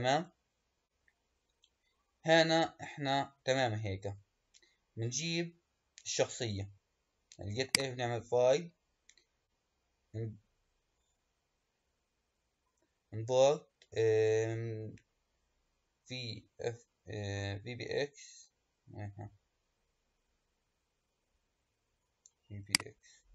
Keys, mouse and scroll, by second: 3.4-4.6 scroll up 2, 4.6-5.2 scroll down 2, 5.2-6.1 scroll down 1, 7.5-10.7 drag.